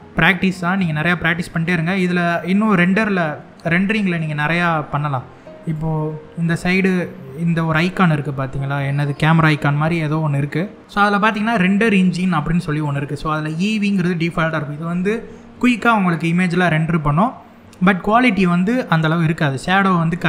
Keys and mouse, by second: 0.0 middle click, 1.2 middle click, 2.4 middle click, 5.3 click, 6.5 click, 11.0 middle click, 11.9-12.5 middle drag, 17.6-17.9 shift+middle drag, 18.4 middle click.